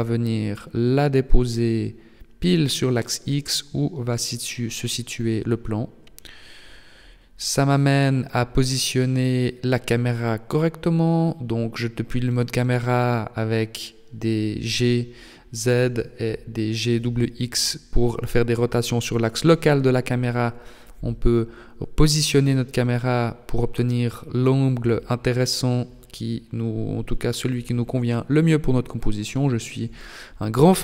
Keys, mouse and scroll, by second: 2.5 click, 3.5 KP_0, 4.5-5.5 scroll down 1, 5.5 right click, 5.5 scroll down 1, 6.3 g, 8.6 r, 10.8 g, 12.5 right click, 13.4 g, 15.7 right click, 18.7 r, 20.6 g, 28.4 r, 30.5 g.